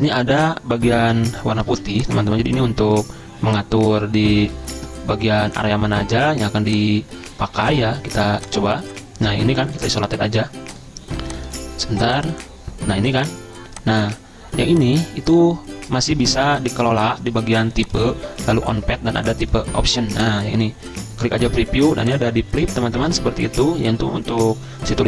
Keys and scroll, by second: 1.7 ctrl+z, 4.5 ctrl+z, 7.5 ctrl+z, 16.3 ctrl+a.